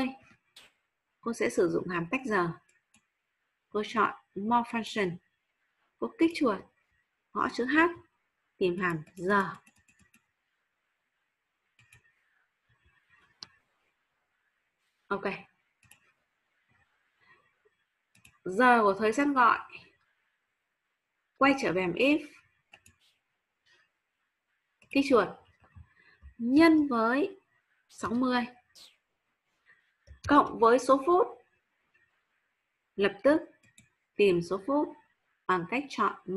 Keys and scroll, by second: 26.5 shift+8, 30.2 shift+=.